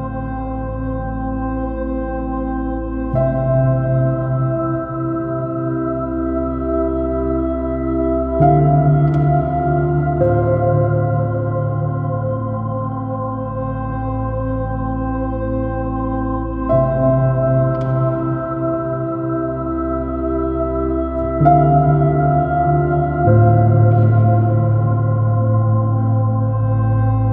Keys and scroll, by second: 0.5 alt+shift+super+space, 0.9 super++, 13.7 space, 16.9 space, 18.5 space, 19.8 space, 21.4 space, 24.0 space, 25.5 space.